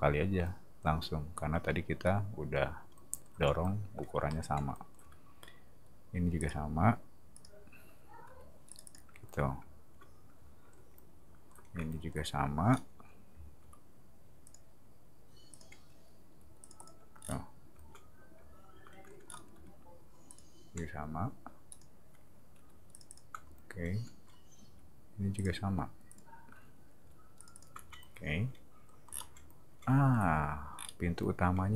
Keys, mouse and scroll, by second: 6.3 click, 7.3 click, 8.3 p, 8.7 click, 8.8 click, 12.7 middle click, 12.9 t, 13.6 r, 14.5 click, 15.5 click, 16.3 p, 16.6 click, 16.8 click, 17.2 scroll up 1, 19.2 middle click, 20.3 click, 21.7 click, 22.6 p, 22.9 click, 23.1 click, 24.6 r, 25.3 click, 26.1 click, 27.3 click, 27.5 click, 29.1 middle click, 30.7 middle click.